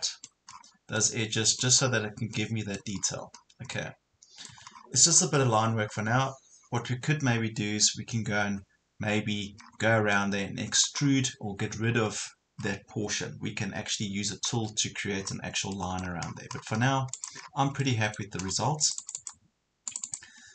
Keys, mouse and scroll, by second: 0.5-1.0 scroll down 1, 1.0 middle click, 1.8 scroll down 1, 2.3 middle click, 3.0 scroll up 1, 4.5 Escape, 4.7 scroll down 1, 5.6 scroll up 1, 6.7-9.0 scroll down 1, 10.1 middle click, 11.0-11.7 scroll down 1, 11.9 scroll up 1, 12.6-14.3 scroll down 1, 15.2 scroll up 1, 15.7 middle click, 16.3 scroll down 1, 17.1 click, 17.4 scroll down 1, 17.8 middle click, 18.5 scroll up 1, 18.9 click.